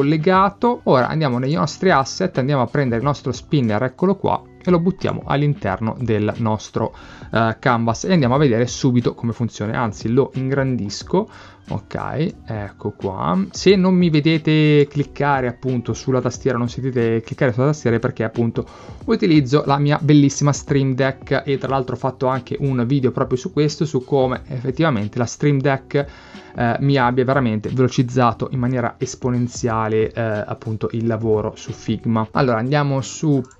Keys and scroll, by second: 10.9 k.